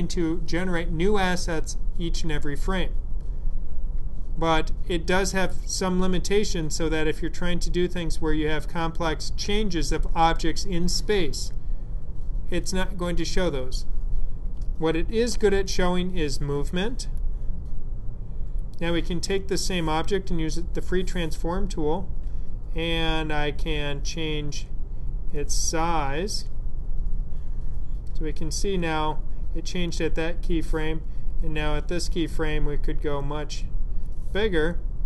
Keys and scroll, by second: 15.1 w.